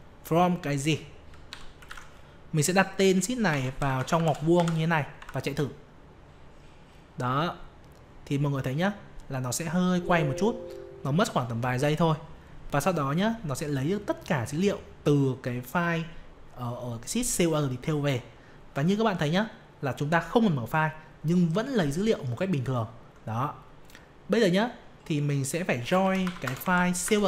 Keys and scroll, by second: 1.8 ctrl+v, 5.1 F5.